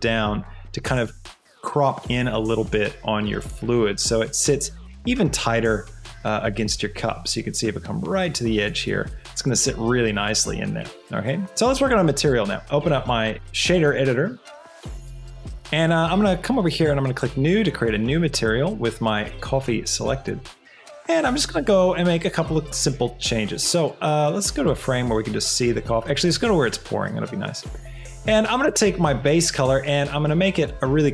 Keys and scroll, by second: 4.0 s, 4.3 Escape, 5.0 s.